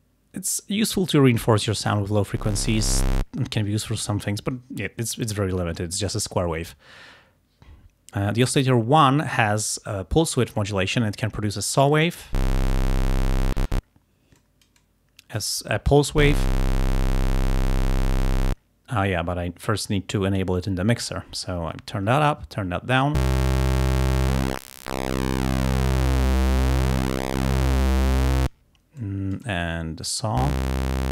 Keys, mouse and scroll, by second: 2.0-3.4 drag, 10.6-12.4 drag, 12.8-13.9 drag, 14.4-15.6 drag, 16.5-18.5 drag, 20.4 click, 21.8-22.3 scroll up 1, 22.6 click, 24.3 click, 26.9-28.7 drag, 29.0-30.4 drag, 30.7-31.1 drag.